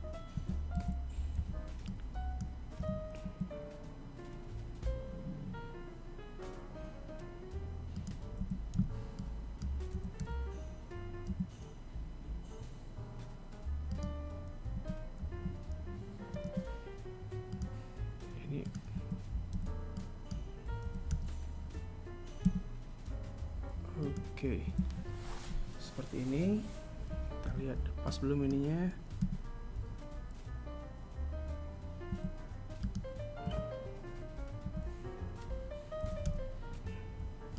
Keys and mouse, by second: 0.6 a, 0.9 a, 1.5 b, 8.5 a, 8.9 b, 14.9 a, 16.4 r, 24.8 a, 27.6 b, 29.3 KP_3, 32.2 a, 32.9 right click, 33.6 KP_1, 34.8 KP_3, 36.1 g.